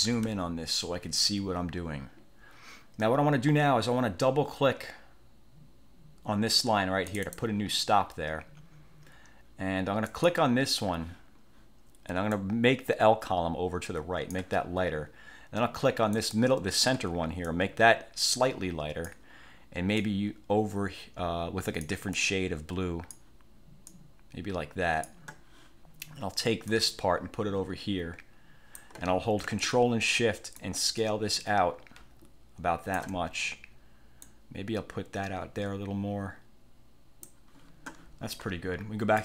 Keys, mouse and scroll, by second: 1.5 scroll up 2, 7.2 click, 10.2 click, 12.5-14.7 drag, 16.3 click, 17.6-19.4 drag, 20.1 click, 22.3-23.5 drag, 24.0 click, 26.8-29.1 drag, 30.7-33.3 ctrl+shift+drag, 34.3-37.5 drag.